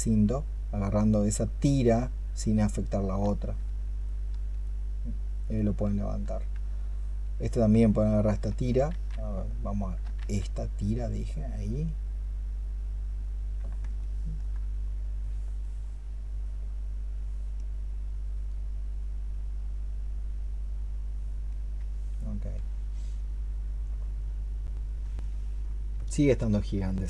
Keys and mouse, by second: 8.8 ctrl+z, 10.0 ctrl+z, 13.8 alt+click, 25.0 alt+click, 26.7 alt+click.